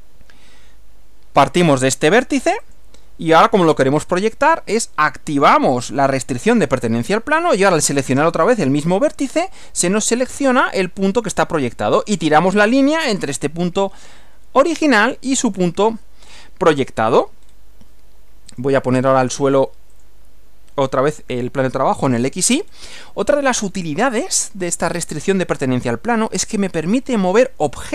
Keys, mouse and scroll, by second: 2.7 click, 6.0 click, 12.0 click, 17.4 scroll down 2, 18.6 click, 20.0 click, 21.4 scroll up 1, 22.7 scroll up 1.